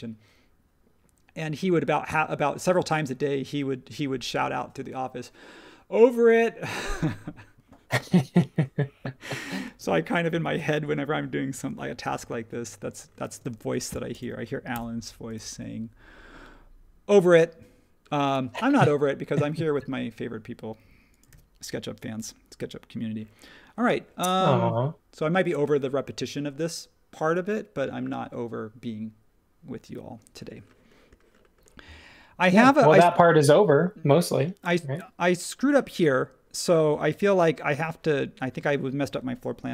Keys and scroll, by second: 13.3 space, 14.7 BackSpace, 21.3 super+s.